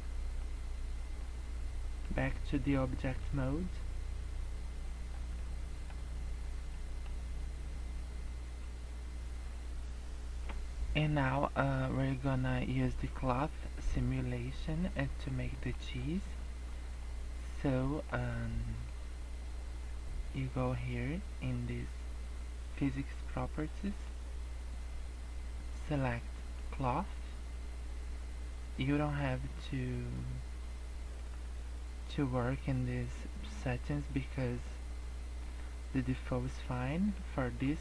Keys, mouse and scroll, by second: 0.4 middle click, 2.3 middle click, 3.5 middle click, 5.4 middle click, 6.1 scroll down 4, 6.4 scroll up 3, 6.7 middle click, 8.8-9.5 scroll up 1, 9.5-11.7 scroll down 1, 13.9 middle click, 15.2 middle click, 15.7 middle click, 16.1 scroll down 1, 16.5 scroll up 1, 17.0 middle click, 18.2 middle click, 23.8 click, 26.5 click, 30.1-31.1 scroll down 6, 31.1-31.5 scroll up 4, 36.9 middle click, 37.6 scroll up 1.